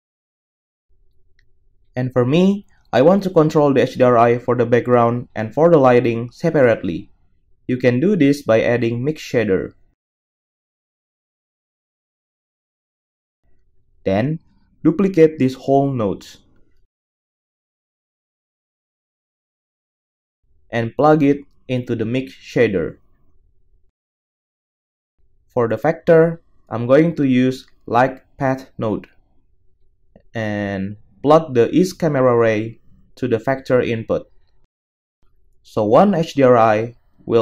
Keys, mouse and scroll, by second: 3.5 g, 4.3-18.9 middle drag, 6.3 shift+a, 13.8 b, 17.3 shift+d, 18.9 click, 19.0-21.4 middle drag, 20.3 x, 21.4-30.5 drag, 26.4 shift+a, 30.5-31.7 middle drag, 31.7-37.4 drag.